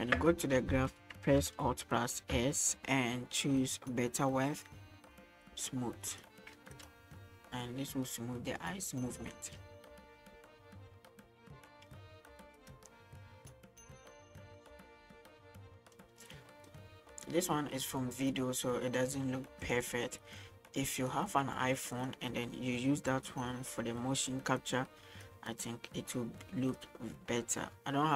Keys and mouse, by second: 2.1 alt+s, 6.1 click, 6.8 click, 7.0 space, 12.7 click, 16.5 middle click, 19.8 click, 21.2-22.3 drag, 24.7 click, 27.0-28.1 drag.